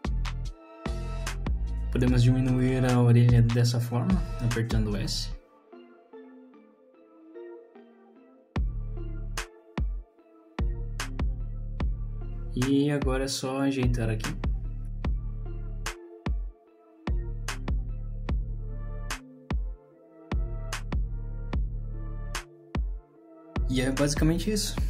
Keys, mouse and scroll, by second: 2.3 click, 2.7 click, 3.3 shift+click, 4.2 s, 5.9 click, 6.1 shift+click, 6.5 s, 7.0 click, 7.5 click, 7.8 shift+click, 8.1 s, 10.3 middle click, 10.8 click, 11.0 middle click, 11.7-12.0 scroll up 3, 11.8 middle click, 12.8 middle click, 12.8 click, 13.1 shift+click, 13.5 middle click, 14.2 g, 14.8 click, 15.5 g, 16.0 middle click, 16.3 click, 16.5 middle click, 16.8 g, 17.2 middle click, 17.6 click, 18.1 g, 18.8 middle click, 19.1 click, 19.2 middle click, 19.5 g, 20.5 middle click, 20.7-21.1 scroll down 3, 20.9 middle click, 21.7-22.0 scroll down 2, 21.8 click, 22.0 middle click, 22.2 middle click, 22.8 middle click, 23.0 scroll down 2, 23.2 middle click, 23.4 middle click, 23.8 scroll up 3, 24.0 middle click.